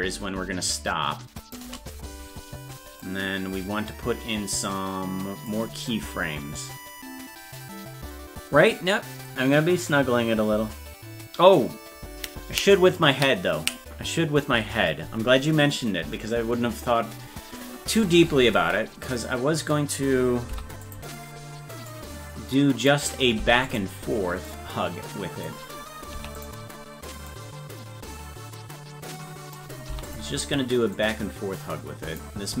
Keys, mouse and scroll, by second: 3.1-5.5 drag, 21.9 click, 23.4 i, 24.5 click, 26.2 i, 27.3-29.6 drag, 29.9 i, 31.0-32.2 drag.